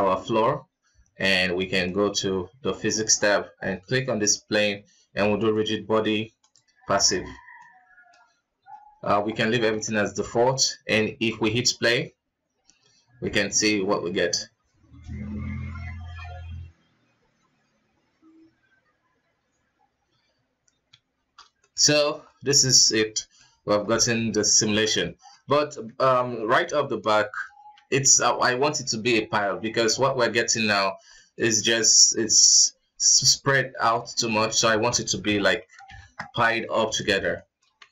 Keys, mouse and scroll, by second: 0.5-1.2 scroll down 4, 1.9 click, 5.5-7.8 drag, 7.8-9.9 middle drag, 9.9 alt+a, 10.5 ctrl+s, 10.8-11.2 middle drag, 11.2 scroll up 1, 11.7 shift+space, 12.3 scroll up 1, 13.7 scroll up 2, 21.5 shift+space, 21.8-22.1 shift+middle drag, 22.1 scroll up 2, 22.4-23.7 middle drag, 23.7 scroll up 3, 24.2-25.7 middle drag, 25.7-26.2 scroll down 5, 26.8 shift+Left, 27.9 KP_1, 30.2 shift+space, 30.9-31.3 scroll down 4, 31.3 middle drag, 31.5 scroll up 2, 32.5 scroll up 1, 34.9 shift+space, 35.6 KP_1, 36.1 shift+Left, 37.5-37.9 shift+middle drag.